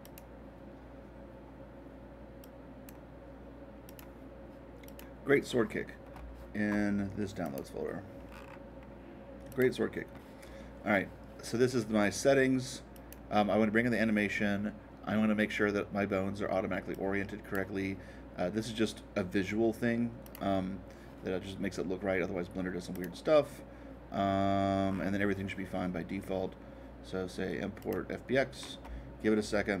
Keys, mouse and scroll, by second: 0.0-2.0 drag, 2.4-4.4 drag, 4.8-6.9 drag, 7.4 click, 8.2-9.5 middle drag, 9.5-11.5 drag, 12.9-14.9 drag, 16.9-18.9 drag, 20.2-22.2 drag, 22.9-24.8 drag, 24.8-26.9 middle drag, 27.8-29.8 drag.